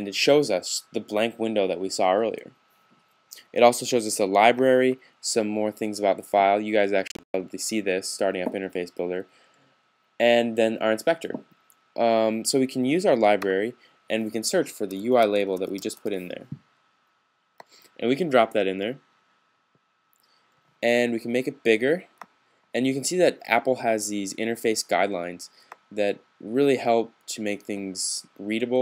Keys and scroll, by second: 14.6-16.4 typing.